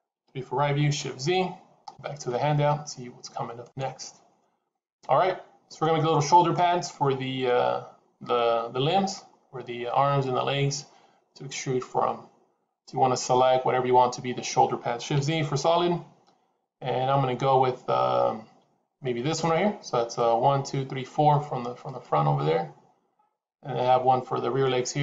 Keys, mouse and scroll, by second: 0.1 KP_3, 1.0 shift+z, 15.0 shift+z, 17.1-18.0 scroll up 1, 21.7 click.